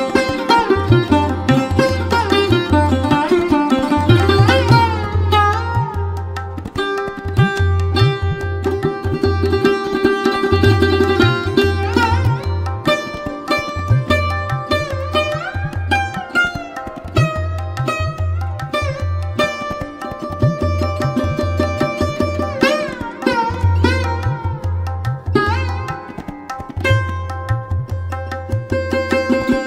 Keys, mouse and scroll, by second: 0.1-1.0 scroll down 1, 1.0-9.3 drag, 13.2 click, 15.1 click, 18.1 click, 20.9 click, 24.1 click, 27.4-29.6 drag.